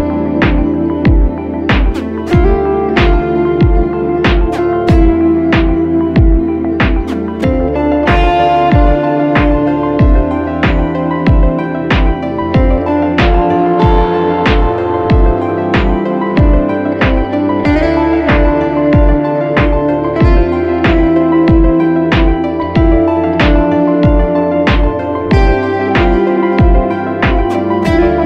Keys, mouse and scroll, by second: 10.0 Left, 26.3 ctrl+t.